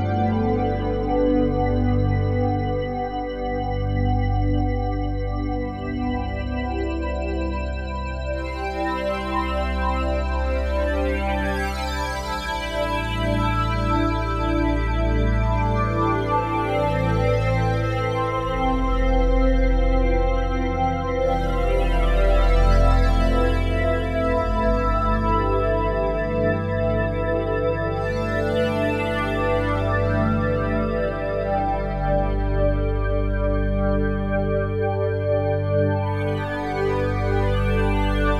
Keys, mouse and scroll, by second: 3.3-6.0 drag, 6.8-9.6 drag, 11.5 super+d, 11.5-15.1 drag, 17.0-20.7 drag, 25.1 click, 27.3 drag, 28.6 ctrl+c, 30.8 click, 32.0 click, 34.0-36.2 drag, 35.0 ctrl+v, 36.3-37.7 drag.